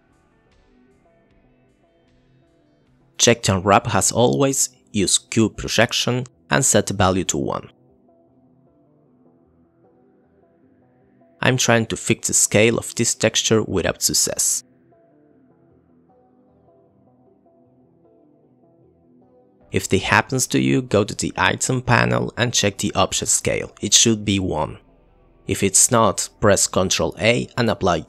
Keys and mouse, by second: 0.9 click, 1.8 click, 2.5 click, 2.7 click, 3.4-3.9 drag, 4.2 click, 5.8 drag, 6.3-6.8 drag, 8.2 click, 8.9 click, 9.1 click, 10.4 ctrl+t, 10.7 click, 10.8 click, 11.3 click, 11.9 click, 12.9 click, 13.9 click, 14.8 click, 14.9 Delete, 16.1 click, 16.3 click, 16.4 click, 16.6 click, 17.4 middle click, 17.9 click, 18.6 middle click, 19.1 click, 19.2 click, 19.5 click, 19.7 click, 20.5-21.9 drag.